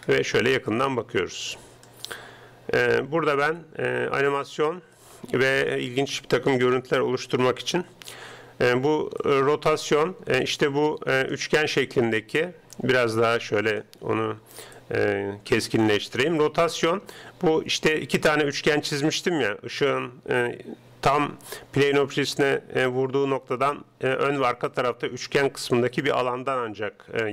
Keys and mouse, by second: 0.0-1.1 middle drag, 3.7-5.4 drag, 9.2-10.9 drag, 12.7-14.5 drag, 14.9-18.2 drag.